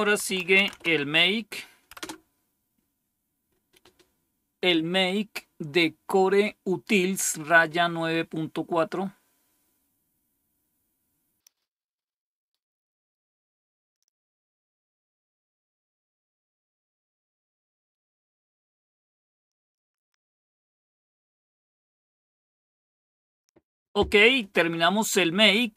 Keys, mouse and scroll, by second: 0.0-1.2 typing, 1.9 Return, 10.1-12.6 scroll down 4, 11.5 click, 12.6-13.1 scroll down 1, 13.1 click, 13.7-25.0 scroll down 2, 25.0-25.5 scroll down 1, 25.5 click.